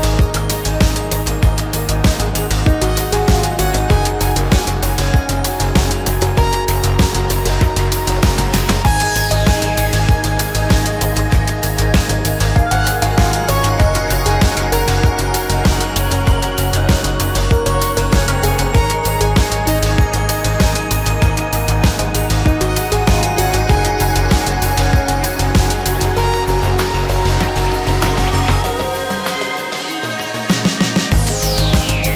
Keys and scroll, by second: 0.4 shift+space, 2.8 shift+space, 4.6 ctrl+a, 5.4 ctrl+g, 9.4 shift+z, 15.4 shift+space, 17.2 Escape, 18.5 shift+a, 19.9 shift+s, 22.7 m, 29.7 p.